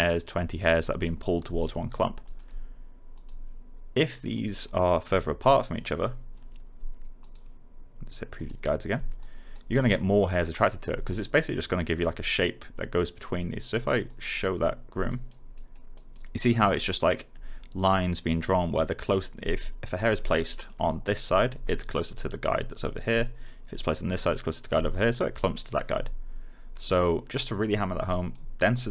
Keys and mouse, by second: 1.6 alt+right click, 3.1 click, 5.0 1, 5.7 click, 10.1 alt+right click, 14.0 click, 15.0 alt+right click, 15.5 alt+middle click, 15.9 alt+right click, 16.3 alt+click, 16.8 alt+middle click, 19.6 right click, 20.3 middle click, 20.8 alt+right click, 23.2 middle click, 24.8 right click, 25.3 alt+click.